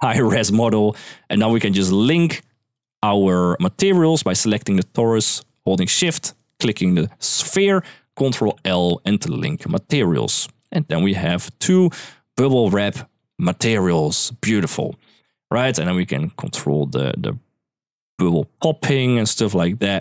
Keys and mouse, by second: 2.5 click, 6.4 shift+click, 8.2 ctrl+l, 10.3 click, 10.7-11.2 middle drag, 12.9 click, 13.3 shift+middle click, 13.6 middle click, 14.5 click, 15.7-20.0 drag.